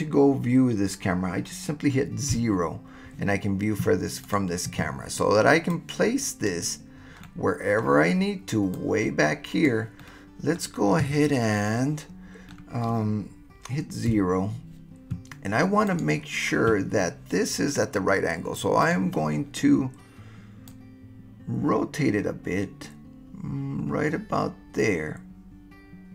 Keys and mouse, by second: 2.3 KP_0, 4.2 click, 5.7-6.5 drag, 7.2 middle click, 7.2 click, 7.3-7.8 middle drag, 8.7 click, 11.5-12.6 middle drag, 14.1 KP_0, 15.9 click, 18.8 click, 20.8-26.1 right drag.